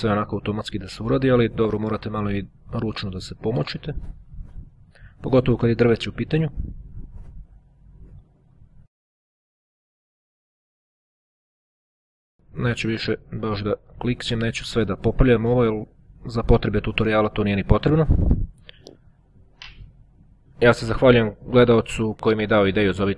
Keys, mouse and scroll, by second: 0.4 click, 1.2 click, 2.7-4.0 drag, 4.8 ctrl+click, 5.5-6.5 drag, 9.0 click, 9.2 click, 11.6 click, 12.6 click, 13.4-14.3 ctrl+scroll down 2, 14.3-14.8 ctrl+scroll down 1, 14.8-15.2 scroll down 2, 15.2-15.8 ctrl+scroll up 2, 15.8-16.4 ctrl+scroll up 1, 16.4 ctrl+click, 17.0 ctrl+click, 19.3-20.3 ctrl+scroll up 3, 20.3-21.7 scroll down 3, 21.7-22.6 ctrl+scroll down 1, 22.6-23.1 ctrl+scroll down 1.